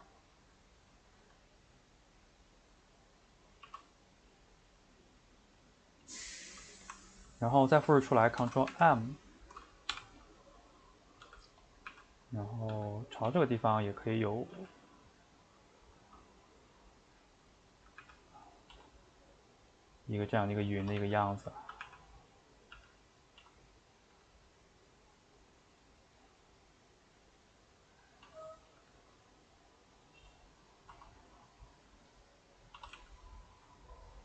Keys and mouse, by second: 3.6 shift+d, 5.9-8.3 middle drag, 8.3 ctrl+m, 10.7 middle click, 11.2 g, 11.9 r, 12.7 g, 16.3-18.0 middle drag, 18.0 r, 18.7 s, 20.0 middle click, 20.8 s, 21.8 r, 22.7 g, 28.2 s, 30.2 click, 30.3 middle click, 30.9 s, 32.3 middle click, 32.8 s, 33.9 middle click.